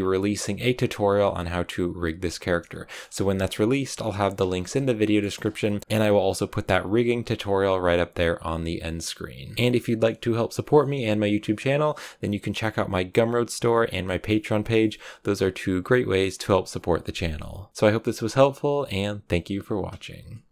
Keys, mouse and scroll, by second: 0.3-0.7 scroll down 1, 0.7-20.5 middle drag.